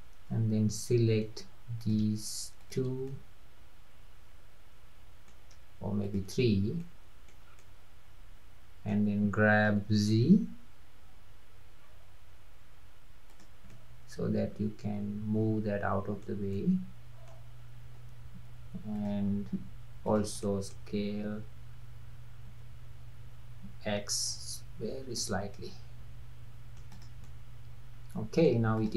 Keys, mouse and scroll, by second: 1.8 click, 2.6 shift+click, 3.1-6.0 middle drag, 6.0 shift+drag, 6.8-7.5 middle drag, 7.5 scroll down 2, 7.6-9.7 middle drag, 9.7 g, 13.7-18.0 middle drag, 18.0 Tab, 19.0 click, 20.0 click, 20.4-22.5 middle drag, 22.5 s, 25.5-26.9 middle drag, 26.9 click, 27.3-28.8 middle drag, 28.8 click.